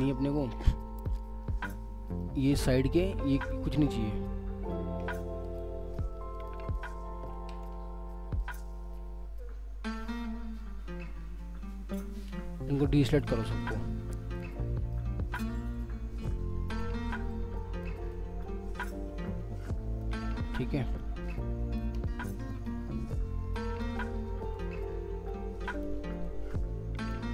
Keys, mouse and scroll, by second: 0.6 alt+scroll down 2, 1.0 alt+middle click, 2.5 alt+scroll up 2, 2.7 alt+middle click, 5.4 alt+click, 7.3 ctrl+z, 8.4 alt+click, 9.1 alt+w, 12.6 scroll, 12.6-13.0 alt+scroll down 2, 13.2 alt+middle click, 13.8 scroll up 1, 14.3 alt+middle click, 15.3 alt+click, 17.1 alt+click, 18.1 alt+click, 19.7 alt+middle click, 22.5 alt+click, 24.5 alt+click, 26.2 alt+click.